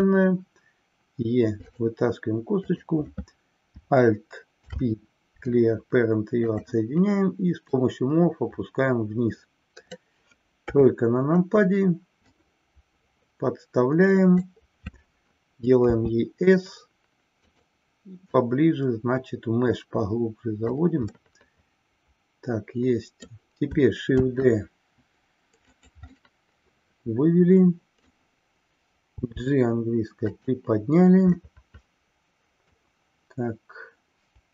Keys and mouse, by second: 1.7 click, 2.8 click, 4.5 alt+p, 7.7-10.1 drag, 10.8 KP_3, 12.4-14.5 drag, 17.7 click, 18.3-20.8 drag, 21.1-23.4 middle drag, 24.4 shift+d, 25.8 click, 26.1-28.3 middle drag, 30.4 click, 31.4-32.8 middle drag.